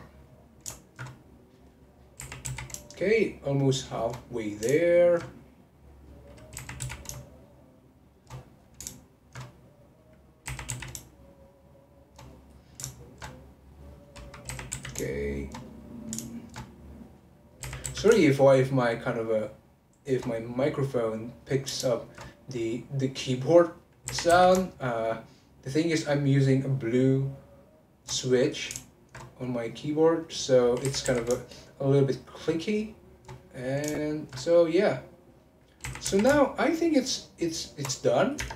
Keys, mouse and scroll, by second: 0.9 alt+shift+click, 1.2 click, 1.7 middle click, 2.2 r, 4.2 middle click, 5.0 alt+shift+click, 5.6 click, 6.1 middle click, 6.5 r, 8.4 middle click, 9.2 alt+shift+click, 9.5 click, 10.0 middle click, 10.4 r, 12.3 middle click, 13.0 alt+shift+click, 13.4 click, 14.1 middle click, 14.5 r, 15.7 middle click, 16.4 alt+shift+click, 16.7 click, 17.2 middle click, 17.6 r, 20.3-22.0 middle drag, 22.0 alt+shift+click, 22.3-23.4 drag, 23.4 middle click, 24.0 r, 28.2 middle click, 29.0 alt+shift+click, 29.3 click, 29.9 middle click, 30.8 r, 33.4 middle click, 34.2 alt+shift+click, 34.4 middle click, 34.8 click, 35.4 middle click, 35.8 r, 38.1 middle click, 38.4 Tab.